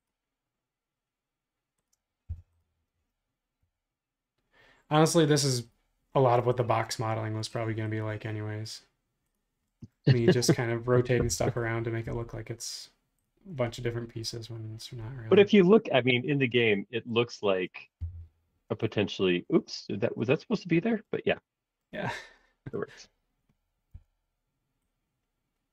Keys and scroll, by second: 2.4 m, 10.4 space, 11.2 m, 18.0 Up, 24.0 q.